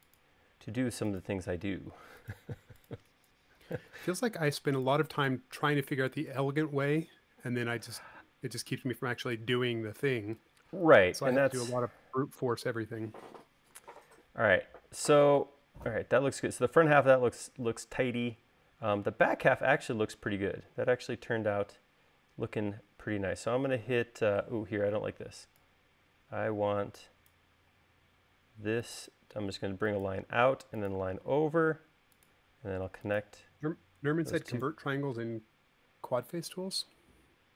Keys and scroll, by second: 24.8 e, 27.8 l, 31.3 l, 35.4 e, 37.0 l.